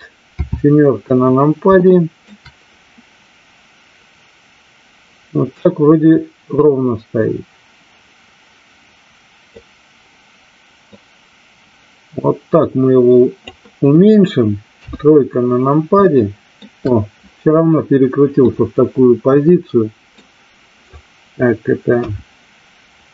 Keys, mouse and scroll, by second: 0.2 KP_7, 1.9-2.4 shift+middle drag, 6.6-9.5 drag, 11.0-13.5 drag, 14.8 KP_3, 16.0-16.6 shift+middle drag, 18.4-20.2 middle drag, 21.9 KP_1.